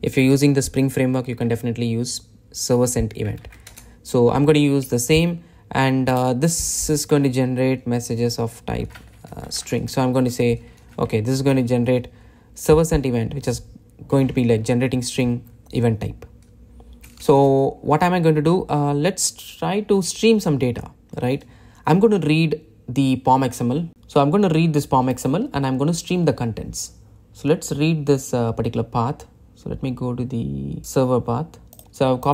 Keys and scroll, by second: 3.8 super+e, 10.5 Return, 31.8 shift+super+c.